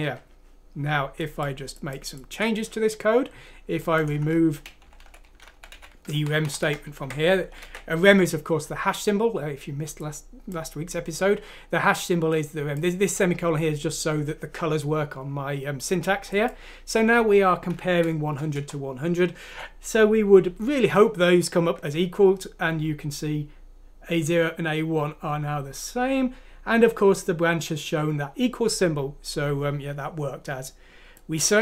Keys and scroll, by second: 4.8 Up, 5.0 Right, 5.3 Down, 5.4 Right, 5.7 Up, 6.1 Right, 6.3 Right, 6.5 typing, 6.9 ctrl+x, 7.2 Down, 7.5 ctrl+v, 17.9 F6, 18.6 Return.